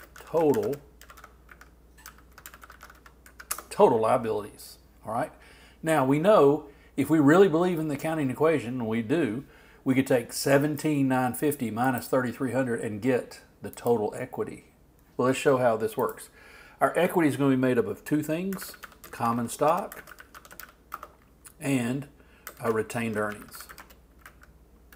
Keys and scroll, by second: 0.0-0.7 typing, 18.6 shift+c, 18.9 shift+o, 19.9 shift+space, 20.2 shift+t, 22.3-23.2 typing.